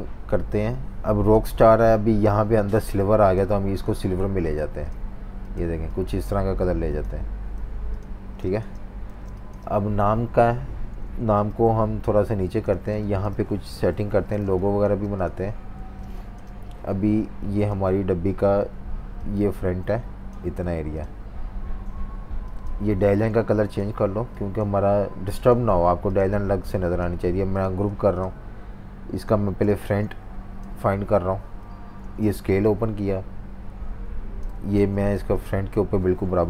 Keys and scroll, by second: 8.2-9.2 typing, 12.7 typing, 13.7 super+-, 14.4 space, 14.9 space, 15.8 v, 20.6 typing, 23.0 super+z, 25.8 v, 29.6 typing, 32.0 super+r, 34.7 super+2, 35.1 v.